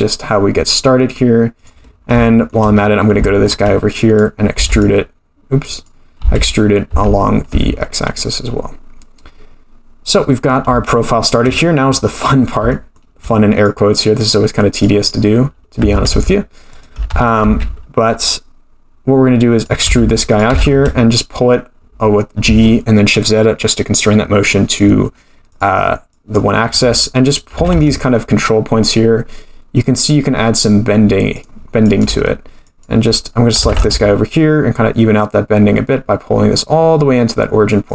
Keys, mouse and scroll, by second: 1.9-2.2 scroll down 3, 2.2 shift+middle click, 2.7-3.2 scroll up 4, 3.2 shift+middle click, 4.0 click, 4.5 e, 5.6 click, 6.2 e, 10.5 scroll down 1, 10.9 shift+middle click, 12.2-12.7 scroll up 2, 12.7 shift+middle click, 13.6 click, 14.8 click, 15.8 g, 17.1 g, 19.8 e, 20.5 g, 26.1 click, 27.5 g, 31.8-33.3 drag, 33.6 g.